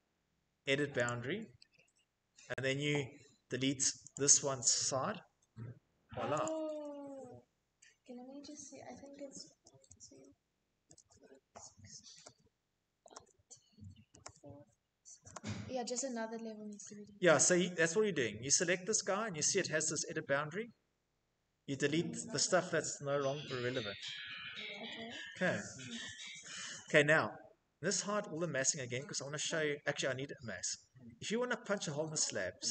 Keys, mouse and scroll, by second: 0.4 click, 3.0 Tab, 4.6 Delete, 7.0 Escape, 9.0 z, 10.3 z, 11.6-12.5 typing, 13.5 z, 14.7 z, 15.8 Escape, 17.9 click, 20.8-23.1 drag, 22.2 Escape, 24.3 middle click, 25.9-26.8 shift+middle click, 26.1-26.7 middle click, 26.3 middle click, 26.5 middle click, 27.3 middle click, 27.4 middle click, 27.8 middle click, 29.9 middle click, 30.0 middle click, 32.2 click.